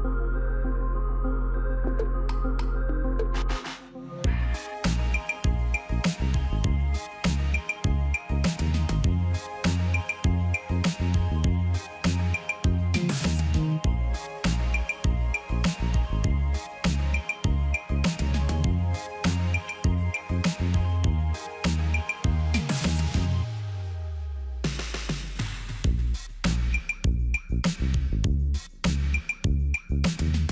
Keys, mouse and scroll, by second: 0.7 ctrl+a, 1.5 ctrl+c, 4.1 ctrl+a, 6.3 ctrl+d, 7.4 double click, 8.0 ctrl+v, 9.4 ctrl+v, 9.5 ctrl+a, 11.1 ctrl+a, 11.4 ctrl+d, 12.2 double click, 12.9 double click, 14.9 ctrl+v, 15.1 ctrl+a, 16.8 ctrl+a, 16.9 ctrl+d, 18.1 double click, 19.0 click, 19.2 ctrl+v, 21.9 ctrl+v, 22.1 ctrl+a, 23.5 ctrl+a, 23.8 ctrl+d, 24.9 double click, 25.8 click, 26.2 ctrl+v, 27.6 ctrl+v, 27.7 ctrl+a, 29.2 ctrl+a, 29.4 ctrl+d.